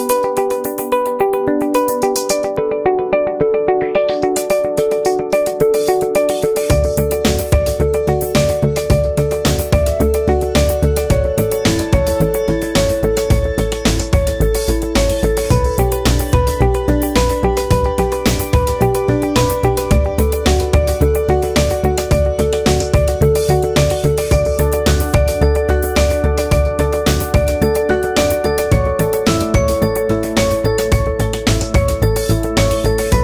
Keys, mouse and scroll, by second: 0.0 f, 0.1-1.7 drag, 1.7 ctrl+z, 1.8-3.2 alt+drag, 3.2 f, 3.3 click, 4.0 c, 4.2 alt+click, 4.3 f, 4.4-6.0 drag, 6.0 alt+right click, 6.1-7.2 alt+drag, 7.2 alt+middle click, 7.3 alt+right click, 7.5 shift+c, 7.5 f, 7.6 alt+click, 7.7 f, 8.1-14.0 drag, 14.0 middle click, 14.2 alt+click, 14.9 alt+right click, 15.0-18.4 alt+drag, 18.4 alt+middle click, 18.6 alt+click, 19.0 g, 19.3 click, 19.6 ctrl+z, 19.8 click, 20.0 f, 20.2 click, 20.5 ctrl+z, 20.6 alt+right click, 20.7 alt+click, 21.1 shift+c, 21.2 f, 21.3-23.0 ctrl+alt+drag, 23.0 alt+right click, 23.2 alt+click, 23.3 alt+right click, 23.4 alt+click, 23.5 g, 24.0 click, 24.3 f, 24.4 click, 25.0 f, 25.1 click, 25.5 alt+right click, 25.8 c, 26.0-27.3 drag, 27.3 g, 27.4 f, 27.6-28.7 drag, 28.7 alt+middle click, 28.8 alt+right click, 29.1 shift+click, 29.6 f, 29.7 click, 30.5 f, 30.7 f, 30.8 click, 31.3 f, 31.4-33.2 drag.